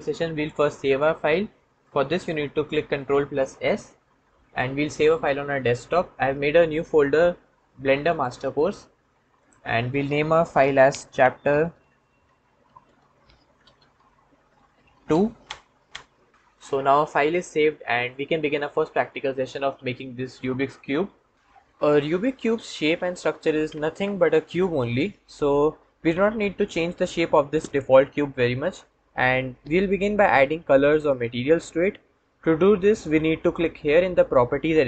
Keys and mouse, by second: 2.9 ctrl+s, 3.2 ctrl+s.